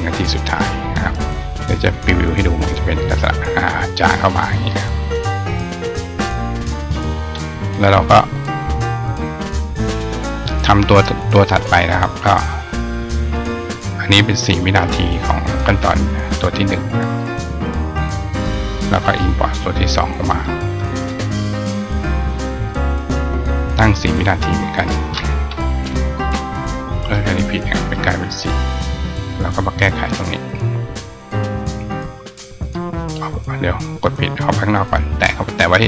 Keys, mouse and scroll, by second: 1.8 click, 6.6 click, 9.9 click, 13.3 click, 13.9 click, 15.1 click, 17.0-17.7 drag, 20.0 click, 21.6 click, 21.7 click, 24.8 click, 29.4 click, 29.7 click, 33.5 click.